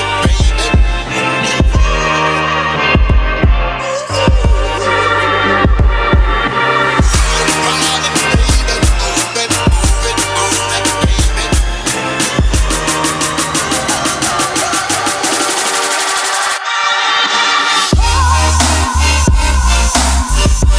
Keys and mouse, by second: 1.2-1.6 ctrl+middle drag, 3.0 middle drag, 3.1 middle click, 5.7-6.4 middle drag, 9.9 click, 14.1-20.7 drag.